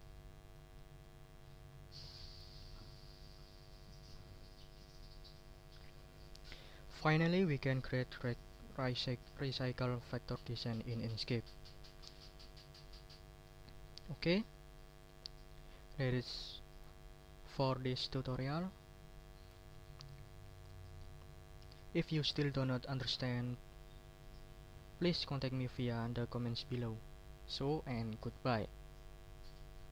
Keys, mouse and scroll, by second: 0.4 click, 1.0 ctrl+middle click, 1.2 ctrl+scroll up 2, 1.7 ctrl+middle click, 2.4 ctrl+scroll up 2, 2.8 ctrl+middle click, 3.9 ctrl+middle click, 19.0 click.